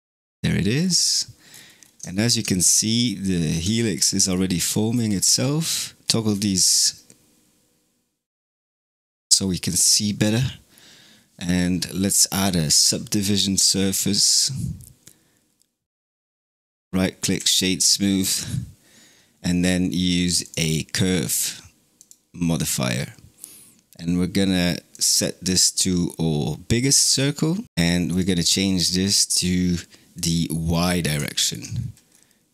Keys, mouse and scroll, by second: 0.6-1.1 scroll down 9, 1.3-1.9 scroll up 7, 1.9 shift+middle click, 2.5-3.6 scroll down 5, 3.6-4.5 shift+middle drag, 4.5-6.0 scroll down 14, 6.0-8.6 scroll up 15, 8.6 click, 12.6 ctrl+2, 16.5-20.3 right drag, 21.9-23.7 drag, 24.8 click, 27.6 shift+middle drag, 27.9-31.0 drag, 31.1-31.6 shift+middle drag, 31.6-32.5 scroll up 4.